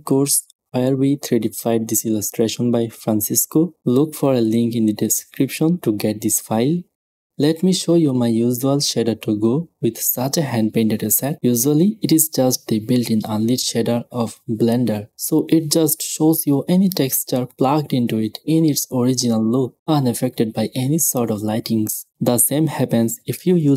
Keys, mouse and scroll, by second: 5.6 click, 7.2 middle click, 8.0-11.3 drag, 11.7-14.7 drag, 16.2-21.8 drag, 19.6 shift+a, 22.4-23.7 drag.